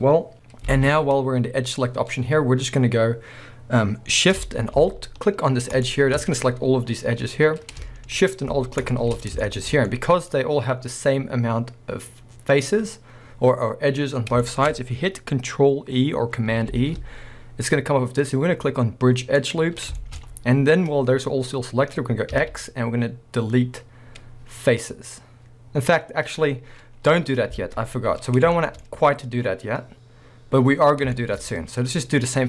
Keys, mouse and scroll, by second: 0.3 middle click, 0.5 scroll up 1, 0.7 alt+a, 2.2 scroll up 1, 5.8 alt+shift+click, 8.8 alt+shift+click, 9.4-10.1 shift+middle drag, 12.5-14.7 middle drag, 16.7 ctrl+e, 22.3 x, 27.6 alt+a, 28.6 shift+middle click, 29.0-31.2 scroll up 2, 31.2 shift+middle click.